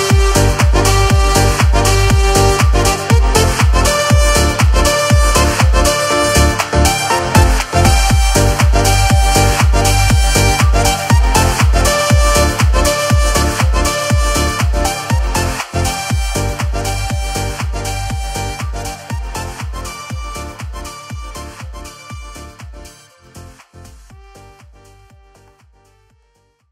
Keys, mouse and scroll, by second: 1.4 click, 2.3 r, 5.1 g, 7.1 alt+a, 7.3 scroll, 7.8-8.2 shift+scroll, 9.0-9.3 shift+scroll.